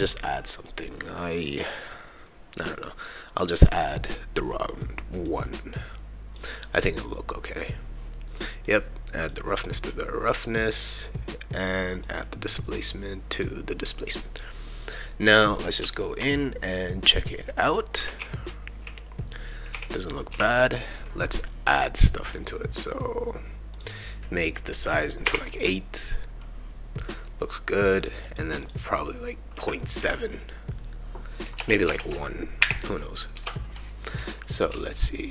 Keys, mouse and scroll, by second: 3.3 scroll up 2, 5.3-6.3 drag, 9.2 click, 12.0-13.4 drag, 15.1-20.8 right drag, 15.8 w, 18.2 q, 19.7 q, 20.3 e, 22.5 scroll up 2, 23.7 click, 23.9-25.2 drag, 28.0 click, 28.2 click, 28.6 click, 31.6 BackSpace, 31.8 BackSpace, 34.1-35.3 right drag, 34.7 s.